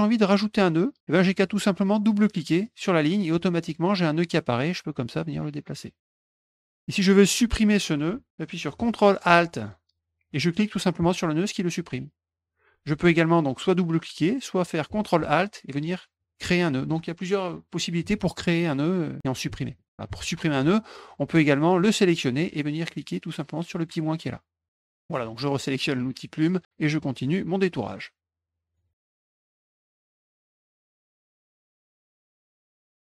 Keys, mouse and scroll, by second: 2.6 click, 2.7 click, 4.1 click, 4.8 click, 6.2 click, 11.0 ctrl+alt+click, 16.2 ctrl+alt+click, 18.6 click, 19.8 ctrl+alt+click, 20.1 ctrl+alt+click, 23.8 click, 24.7 middle click, 26.4 click, 26.6 middle click, 27.8-28.7 drag, 29.0 click, 29.1 click, 29.2 middle click, 29.3 click, 29.4 click, 29.5 middle click, 29.6 click, 29.7 click, 29.9 click, 29.9 middle click, 30.0 click, 30.2 click, 30.3 click, 30.5 click, 30.6 click, 30.8 middle click, 30.9 click, 31.0 click, 31.1 click, 31.2 click, 31.4 click, 31.5 middle click, 31.6 click, 31.8 click, 31.9 middle click, 32.0 click, 32.1 middle click, 32.2 click, 32.4 click, 32.5 middle click, 32.6 click, 32.7 middle click, 32.8 click, 33.0 click, 33.0 middle click.